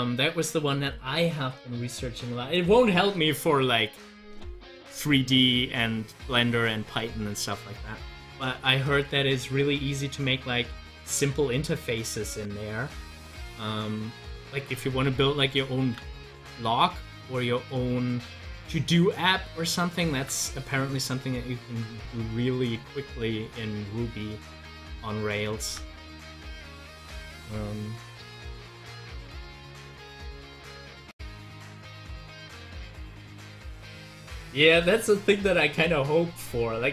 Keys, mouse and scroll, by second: 12.1-15.7 drag, 15.8 ctrl+z, 16.2 ctrl+z, 17.1-18.3 drag, 18.3 ctrl+z, 20.2 z, 20.8-22.8 drag, 22.8 ctrl+z, 25.6 ctrl+z, 33.2 click.